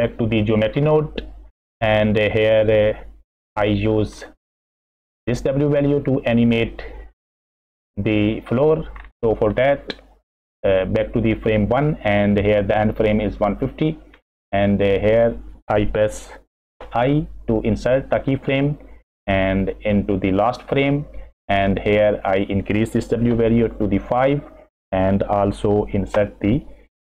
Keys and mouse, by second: 0.0 right click, 0.2 middle drag, 1.6-4.1 middle drag, 4.5 middle click, 5.7 middle click, 6.4 middle click, 6.5 click, 7.4 middle click, 7.7 click, 7.9 middle click, 9.6 middle click, 17.0 i, 19.4 click, 22.2-23.7 drag, 26.1 i.